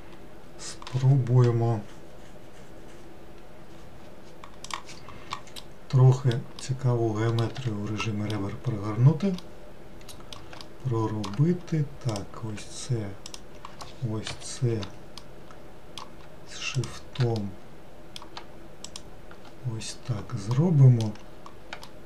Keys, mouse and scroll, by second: 5.6-7.6 middle drag, 7.6 2, 8.0 middle click, 8.6-9.4 scroll up 2, 9.4-12.1 middle drag, 12.1 click, 13.3 shift+click, 14.3 KP_Decimal, 15.2-16.8 middle drag, 16.8 shift+click, 17.4-18.8 middle drag, 18.8 shift+click, 19.8-20.6 scroll down 2, 20.6 middle click, 21.3 scroll down 2, 21.9-22.0 shift+middle drag.